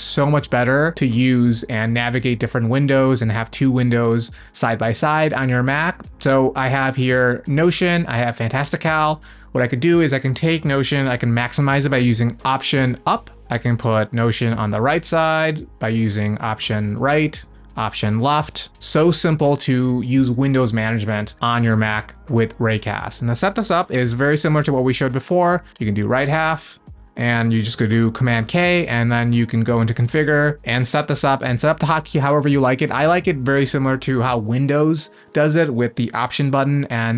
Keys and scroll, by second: 13.1 alt+Up, 14.8 alt+Right, 17.8 alt+Left, 23.9 super+space.